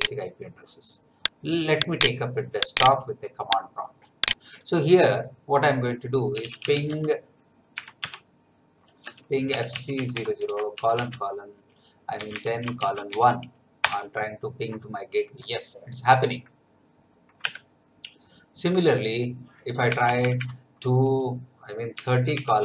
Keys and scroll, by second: 6.1-7.7 typing, 8.0 Tab, 9.0-10.7 typing, 11.9-13.1 typing, 13.8 Return, 17.4 Up, 19.8 BackSpace, 21.9-22.6 typing.